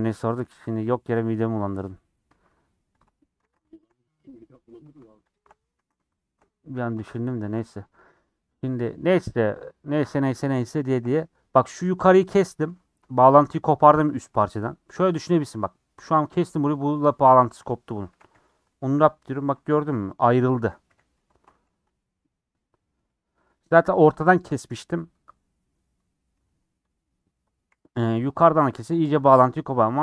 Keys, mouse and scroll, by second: 0.1-0.8 scroll up 5, 0.3 shift+middle click, 1.6 alt+click, 1.8-3.0 middle drag, 3.0 alt+shift+click, 3.4 ctrl+z, 3.8 alt+shift+click, 4.0-5.3 middle drag, 5.3 alt+shift+click, 5.8 ctrl+z, 6.3 alt+shift+click, 6.4 scroll up 1, 6.5 middle click, 7.4 alt+shift+click, 7.9 middle click, 8.9-9.7 scroll down 5, 10.2 scroll down 4, 10.5 scroll up 2, 10.8-18.1 shift+middle drag, 18.1 a, 18.3 u, 19.4 3, 19.6 middle click, 20.1 click, 21.1 l, 21.6 g, 26.4 g, 27.7 g, 29.2 g.